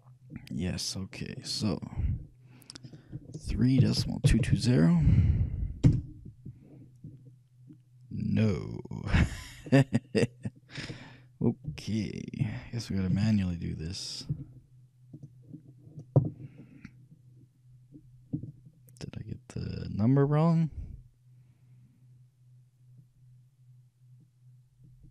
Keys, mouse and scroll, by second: 0.0-1.6 middle drag, 3.0-4.7 drag, 4.5 2, 8.5-11.7 middle drag, 11.8 KP_3, 13.3 z, 14.5 z, 18.6-20.2 shift+drag.